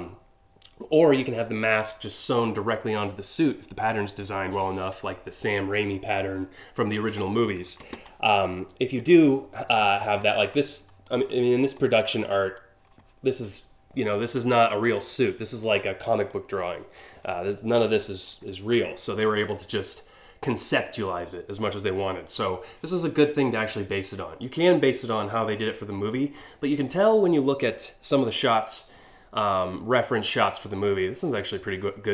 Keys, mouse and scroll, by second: 8.6 click, 9.4 click, 10.3 scroll down 1, 10.7 click, 11.5 scroll up 1, 11.8 click, 14.7 scroll down 1, 15.3 click, 28.2 click, 30.3 click, 32.0-32.1 scroll up 2.